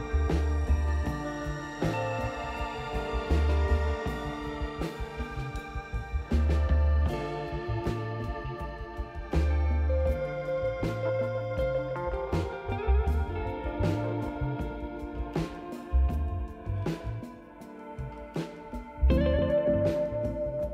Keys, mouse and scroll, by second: 0.7 ctrl+click, 5.3 click, 8.8 click, 9.9 ctrl+click, 11.6 click, 14.7-15.2 scroll down 4, 15.8 scroll down 1, 16.6 click, 17.4 click, 18.6 click, 19.9 click.